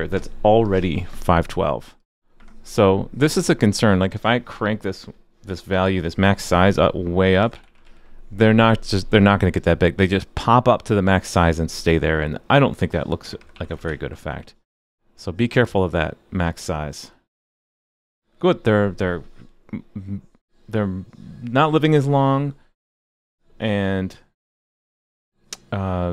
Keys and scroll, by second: 7.8 super+s, 13.9 super+s.